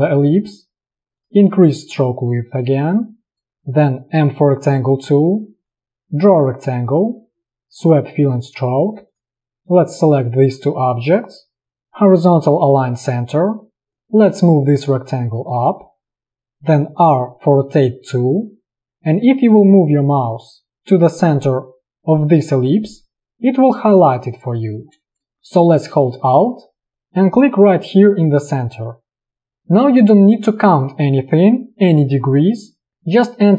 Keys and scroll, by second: 4.2 m, 8.7 v, 17.2 r.